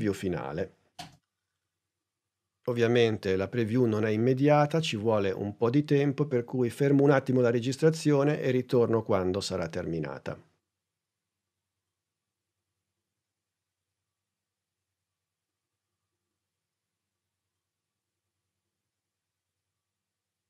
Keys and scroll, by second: 0.9 space.